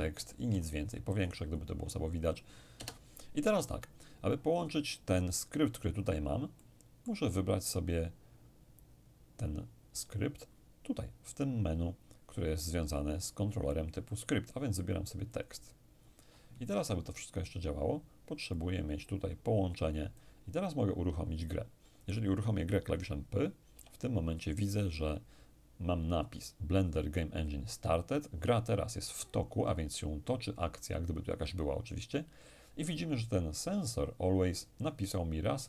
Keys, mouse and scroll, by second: 0.5-2.2 ctrl+scroll up 2, 2.2 ctrl+scroll up 1, 2.7 ctrl+BackSpace, 6.5-8.0 middle drag, 14.1 click, 15.3 click, 18.5-21.1 drag, 23.7 p.